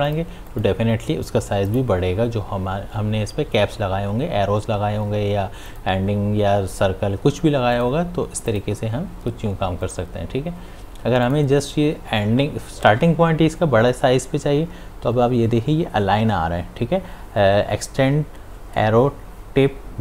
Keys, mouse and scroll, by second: 0.0 click, 5.7 click.